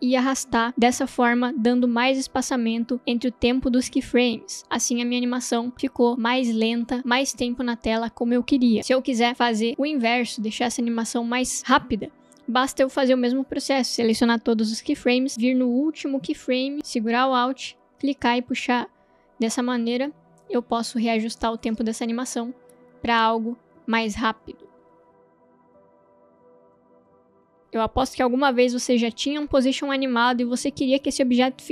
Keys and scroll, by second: 4.6 space, 11.1 space, 21.6 space.